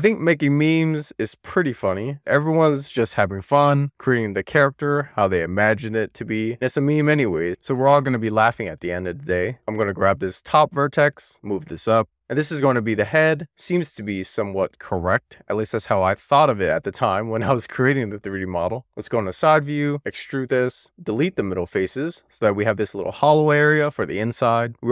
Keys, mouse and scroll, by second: 0.5 alt+z, 1.7-3.9 scroll up 2, 8.1-9.5 scroll up 1, 9.8 click, 11.8 super+z, 13.8 click, 14.6 click, 15.8 click, 16.4 click, 17.7 click, 18.7 alt+middle click, 19.1-19.9 scroll up 3, 20.0 d, 20.8 middle click, 21.5 x, 24.1-24.9 middle drag.